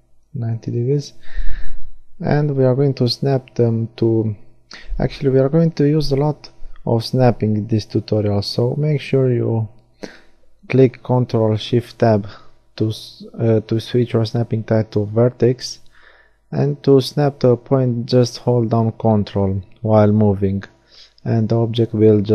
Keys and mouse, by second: 2.0 z, 6.3 g, 8.5 click, 10.0 z, 10.8-12.8 middle drag, 15.1 g, 17.8 click.